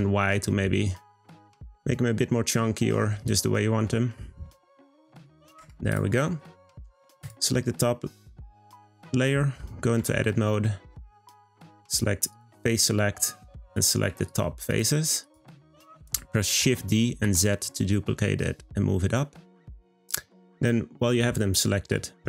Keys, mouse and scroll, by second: 5.5 Tab, 5.9 click, 6.4-7.2 middle drag, 7.2 click, 8.2 click, 8.6-10.0 scroll up 2, 10.0 Tab, 12.3-13.7 drag, 14.2 shift+click, 14.7 shift+click, 15.2 shift+click, 16.6 shift+d.